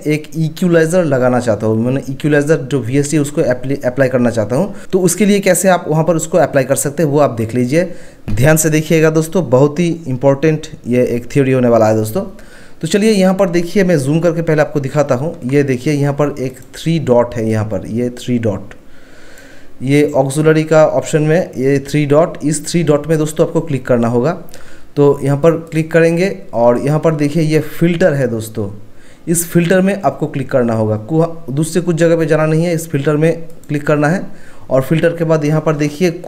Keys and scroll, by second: 14.8 ctrl+1, 22.1 Escape, 22.2 ctrl+1.